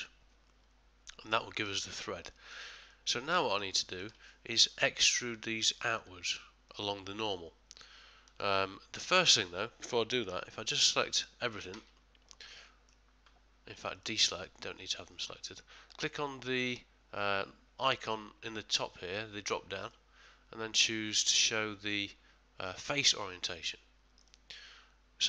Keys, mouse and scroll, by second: 0.0 middle click, 0.8 middle click, 1.8 middle click, 2.3 ctrl+middle click, 2.8 ctrl+middle click, 2.9 ctrl+middle click, 3.7 middle click, 3.8 ctrl+middle click, 4.3 shift+middle click, 6.7 middle click, 11.7 a, 12.3 middle click, 12.7 middle click, 13.9 click, 19.8 click.